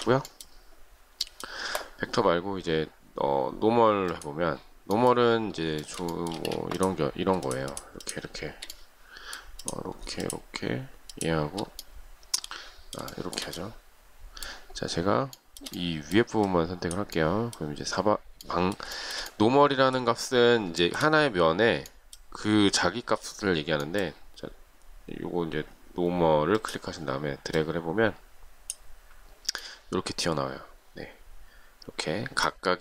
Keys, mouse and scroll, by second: 1.1 shift+scroll down 1, 1.2-2.3 shift+scroll up 1, 5.7 shift+middle click, 6.2 space, 7.3 shift+click, 7.5 shift+click, 7.6 shift+double click, 7.9 shift+click, 10.0 shift+click, 10.7 shift+click, 12.9 shift+middle click, 15.2 shift+middle click, 18.8 shift+middle click, 20.6 shift+middle click.